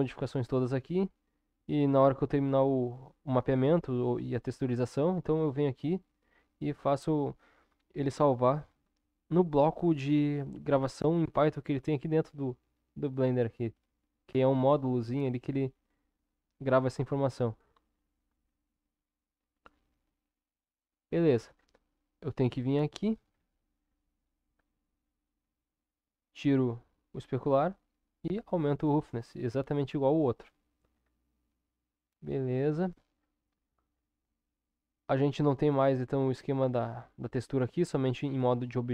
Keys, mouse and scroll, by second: 25.0-38.9 drag.